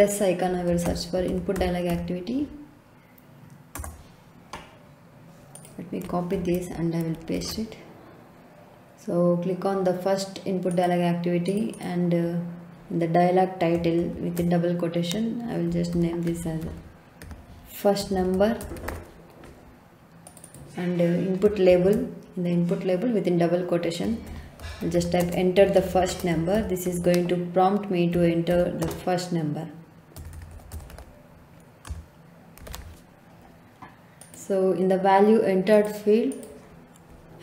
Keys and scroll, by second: 0.4-2.3 typing, 3.7 Return, 6.3 ctrl+c, 7.3 ctrl+v, 14.0 shift+', 15.4-19.4 typing, 21.6 shift+', 23.8-28.7 typing, 29.9-33.1 typing.